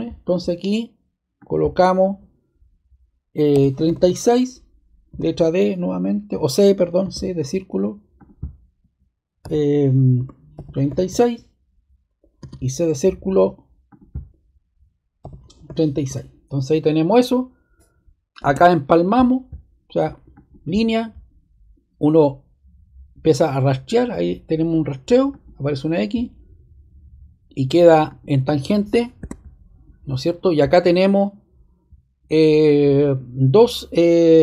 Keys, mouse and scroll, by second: 1.3-2.4 drag, 3.5-3.8 typing, 3.9 Return, 5.2 d, 7.0 c, 8.1 click, 9.4-11.3 typing, 12.3 c, 15.2-15.6 typing, 16.1 Return, 17.1 typing, 18.4 ⟲, 25.3 click, 28.0 click, 29.1 super+z.